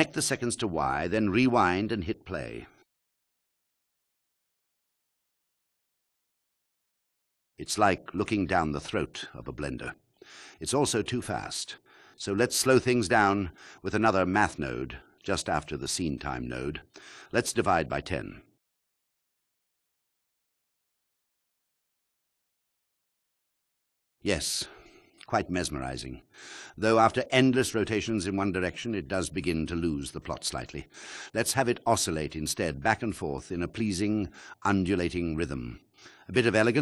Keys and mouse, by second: 0.2-4.9 drag, 5.0 alt+click, 7.1 KP_1, 12.3 click, 13.8 click, 14.8 shift+a, 16.4-16.8 drag, 18.2-19.3 drag, 19.7-21.5 drag, 22.8 click.